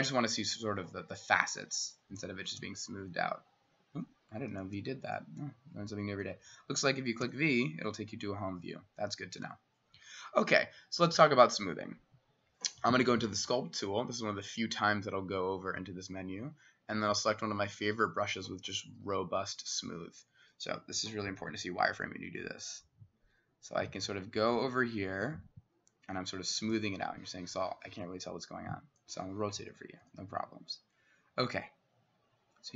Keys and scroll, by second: 2.1 v, 3.9 Escape, 4.6 v, 7.3 v, 21.3 w, 29.6 c.